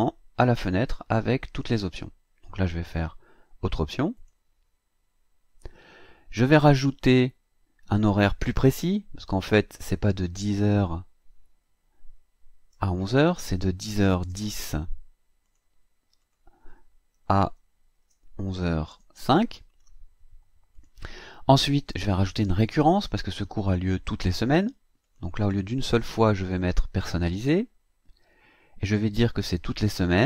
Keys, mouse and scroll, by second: 4.2 click, 9.4 click, 11.6 Right, 12.7 BackSpace, 14.0 KP_1, 14.2 KP_0, 15.4 click, 16.2 click, 17.1 Right, 17.8 BackSpace, 18.9 KP_0, 19.1 KP_5, 20.7 click, 25.0 click, 27.2 click.